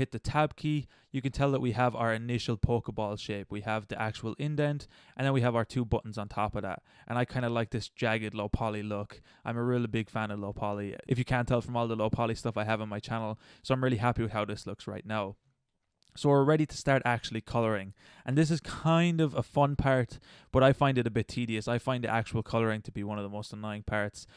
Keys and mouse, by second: 4.8-6.3 middle drag, 6.3-6.7 middle drag, 7.6-8.9 middle drag, 9.0-9.5 middle drag, 12.6 middle click, 13.5-14.1 middle drag, 14.3-17.2 middle drag, 24.3 middle click.